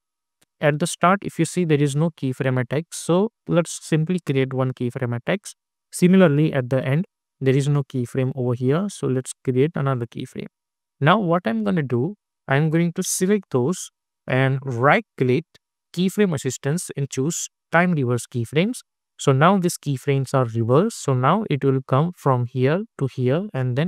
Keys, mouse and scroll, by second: 4.1-9.4 drag, 11.6-15.0 drag, 15.0 right click, 15.9 click, 20.5 space.